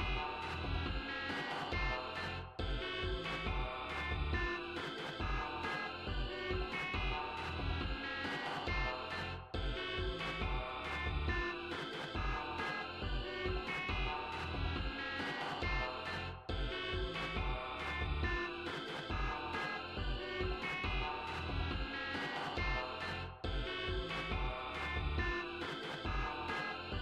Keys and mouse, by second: 1.8 click, 6.3 e, 18.6 g, 20.8 click, 24.4 right click.